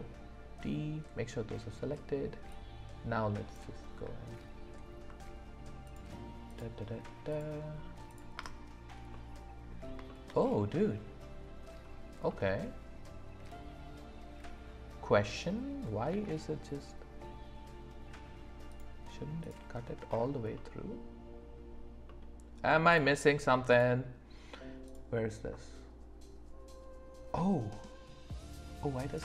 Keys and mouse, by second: 2.6 click, 5.8 click, 6.5 click, 7.3 click, 8.1 click, 8.4 space, 9.1 click, 10.0 shift+middle drag, 12.3-14.9 middle drag, 14.9 middle click, 16.1 d, 20.5-21.5 middle drag, 22.0 middle click, 22.9 click, 23.7 click.